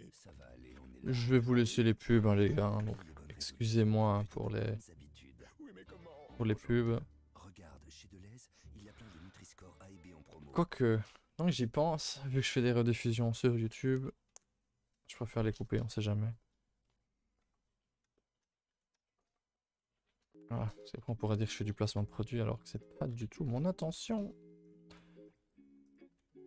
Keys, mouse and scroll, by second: 1.0 scroll, 1.1-1.9 scroll down 9, 1.9 click, 2.4 a, 2.6 a, 2.9 ctrl+s, 5.1 scroll up 2, 5.8 scroll up 2, 5.9 a, 6.5 ctrl+s, 7.3 middle click.